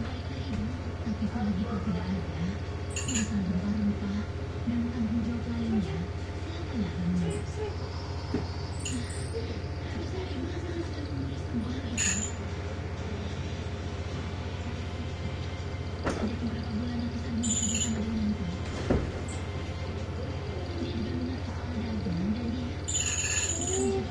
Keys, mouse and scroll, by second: 0.6 ctrl+Return, 2.5 click, 4.1-5.5 drag, 7.2-8.5 drag, 9.4 click, 11.7 click, 13.5 click, 14.2 click, 17.1 click, 18.7 ctrl+d, 21.0 shift+Down.